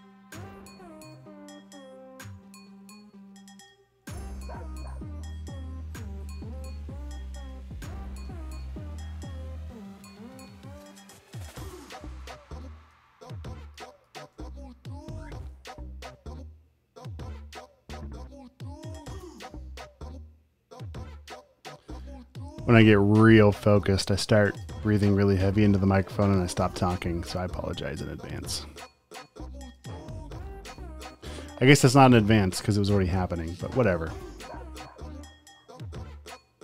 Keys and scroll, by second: 6.9 a, 9.8 super+z, 11.7-14.0 typing, 14.5 super+space, 15.2-16.6 typing, 29.9-30.8 typing.